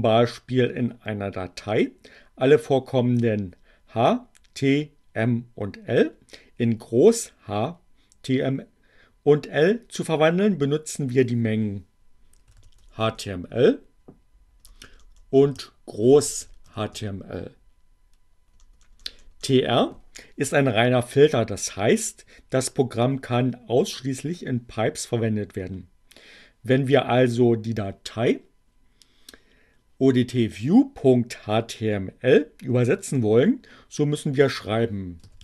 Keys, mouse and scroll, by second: 12.0-13.6 typing, 14.7-17.6 typing, 35.1-35.4 typing.